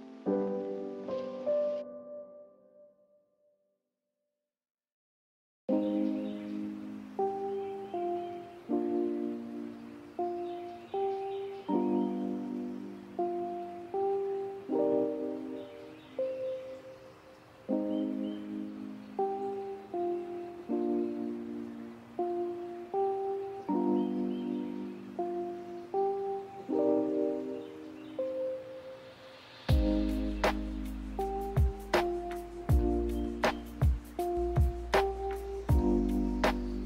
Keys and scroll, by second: 7.8 Delete, 8.6 b, 13.2 m, 16.2 a, 17.5 m, 19.7 b, 20.4 Delete, 20.8 Delete, 21.7 m, 25.1 m, 26.2 z, 29.0 m, 36.5 ctrl+z.